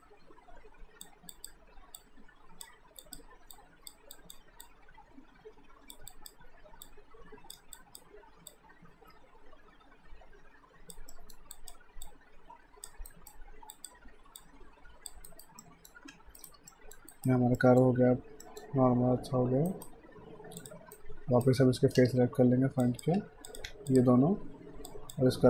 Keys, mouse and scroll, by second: 11.1 alt+middle click, 11.6 click, 13.1 alt+right click, 13.7 click, 15.3 alt+right click, 15.6 alt+middle click, 16.1 q, 16.4 right click, 16.7 alt+middle click, 17.1 alt+right click, 17.6 alt+middle click, 19.7 right click, 20.6 click, 20.9 right click, 22.0 space, 22.8 alt+click, 23.2 q, 23.5 click, 23.9 shift+click.